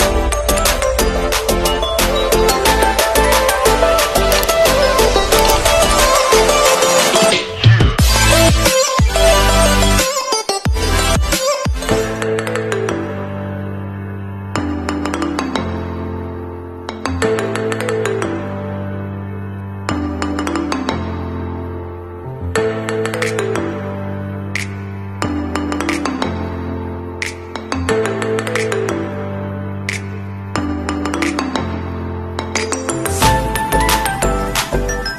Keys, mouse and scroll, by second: 3.1 click, 16.8 ctrl+z, 17.3 ctrl+z, 19.2 click, 30.6 ctrl+z, 32.3 click.